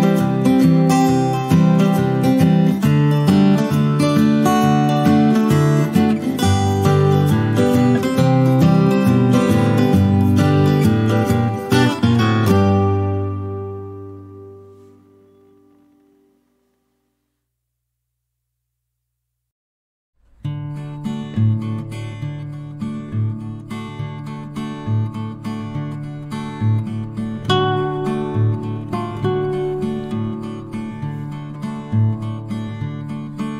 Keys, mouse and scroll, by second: 4.6 shift+click, 5.9 shift+click, 6.8 click, 12.3 ctrl+alt+c, 12.5 click, 13.0 ctrl+alt+v, 15.1-16.3 drag, 16.9-17.4 ctrl+scroll down 2, 17.5 click, 21.5-22.8 ctrl+scroll up 2, 22.8 e, 25.1-25.6 click, 25.9 ctrl+z, 27.0 e, 27.7-28.3 click, 28.4 ctrl+z, 29.5 o, 30.1-31.3 drag.